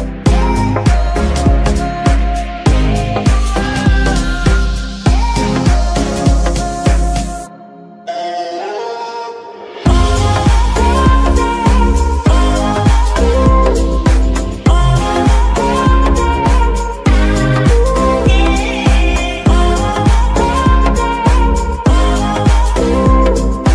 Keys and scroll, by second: 1.8 g, 1.8 y, 3.9 g, 3.9 z, 20.3 KP_3, 20.8 z.